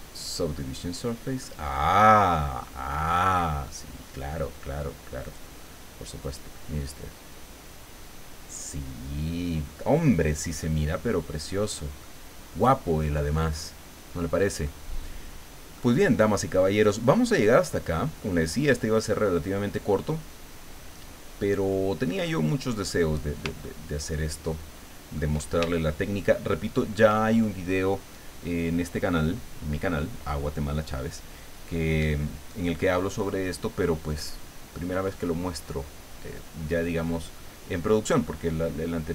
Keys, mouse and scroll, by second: 0.1-0.5 ctrl+scroll down 1, 0.6-1.6 right drag, 1.7-2.0 scroll up 1, 2.8 middle click, 3.7 middle click, 5.3 click, 6.2 click, 10.6-12.2 middle drag, 15.8-18.4 middle drag, 22.3 middle click, 23.6-25.4 shift+middle drag, 25.8-27.1 shift+middle drag.